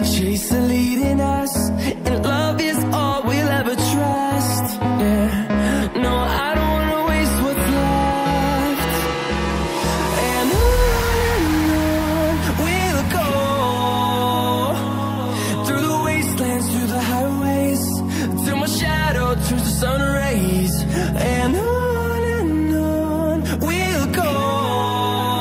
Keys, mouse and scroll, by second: 0.9 scroll up 1, 3.6 scroll down 1, 4.3 click, 4.4 double click, 6.0 scroll up 1, 6.6 right click, 7.5 click, 8.4 scroll down 1, 8.9 click, 9.9 scroll up 1, 10.8 click, 12.2 scroll down 1, 13.0 scroll up 1, 13.4 click, 21.5 scroll down 1, 22.0 click, 22.3 double click, 24.5 right click.